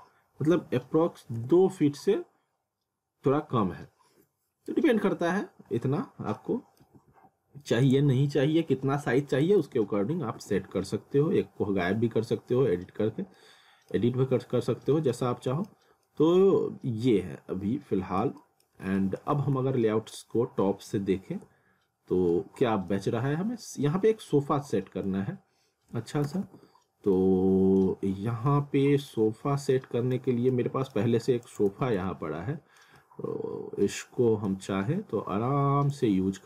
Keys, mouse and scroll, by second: 6.4 middle click, 6.9 typing, 7.9 click, 9.6 w, 13.1 scroll down 1, 13.4 alt+middle click, 14.7 scroll up 1, 15.1 alt+middle click, 16.1 alt+middle click, 19.0 alt+middle click, 19.3 alt+w, 20.2 scroll down 1, 21.4 F3, 22.3 middle click, 23.4-24.4 scroll up 1, 24.7 middle click, 26.3 w, 27.0 alt+middle click, 28.1 scroll down 1, 28.5 middle click, 29.4 scroll down 1, 29.7 middle click, 31.5 click, 31.7 z, 32.1 alt+middle click, 33.0 alt+middle click, 34.7 scroll down 1, 35.9 click.